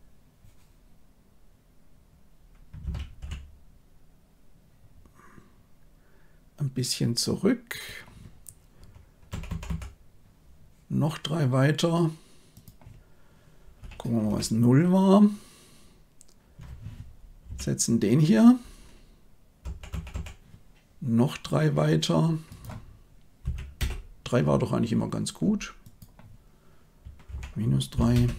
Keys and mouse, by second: 2.8 r, 9.2 Right, 9.4 Right, 9.6 Right, 12.5-14.3 drag, 19.6 Right, 19.9 Right, 20.1 Right, 22.5-23.8 drag, 25.8-28.1 drag.